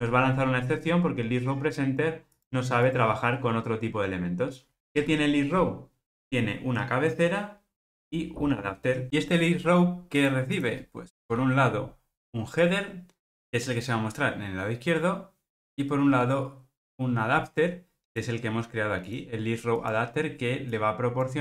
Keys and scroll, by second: 5.0 super+p, 11.3 super+p.